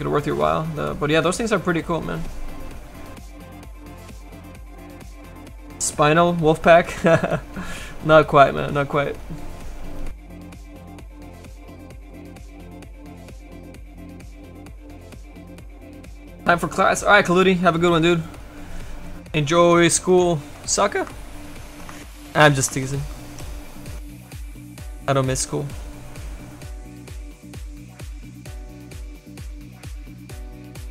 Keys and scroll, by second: 25.7 s.